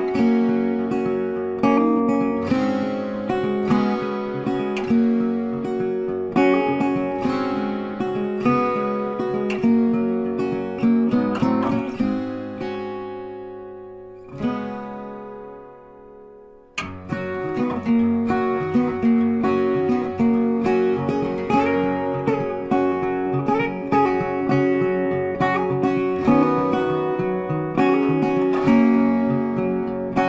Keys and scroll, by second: 5.7 space, 8.6 shift+c, 9.2 shift+e, 22.7 shift+c, 23.0 shift+b.